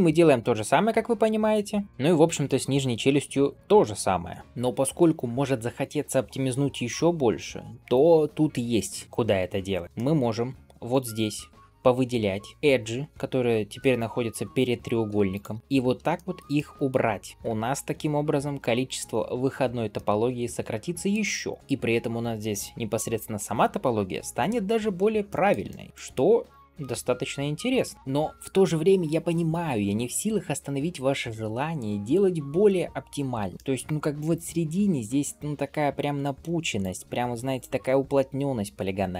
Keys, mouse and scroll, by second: 0.3-1.8 middle drag, 3.3 alt+q, 3.5-4.2 scroll up 2, 4.3 middle click, 4.4-5.2 scroll down 1, 9.8 middle click, 10.2-10.5 scroll up 2, 10.7 click, 12.5 scroll down 1, 15.2 shift+click, 15.6 ctrl+x, 16.0 shift+middle click, 16.4 middle click, 17.3 click, 17.5 ctrl+x, 19.0 shift+middle click, 19.8-21.0 middle drag, 21.6 scroll up 1, 24.6 scroll down 2, 25.1 shift+middle click, 25.5 middle click, 26.3 click, 26.9 ctrl+x, 27.6 click, 27.9 shift+middle click, 27.9 scroll down 1, 33.5 middle click, 35.4 scroll up 1, 36.6 click, 37.4 shift+click.